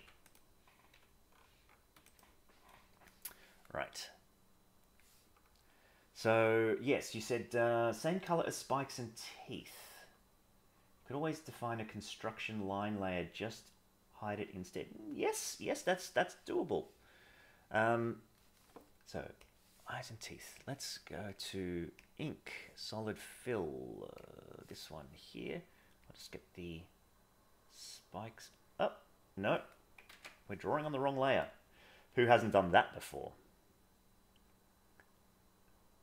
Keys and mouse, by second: 0.9 g, 4.0-4.9 drag, 8.5 middle click, 15.1 middle click, 16.3 middle click, 17.1-18.3 middle drag, 21.2 click, 26.1-29.4 drag, 30.1 ctrl+z, 33.3-36.0 drag.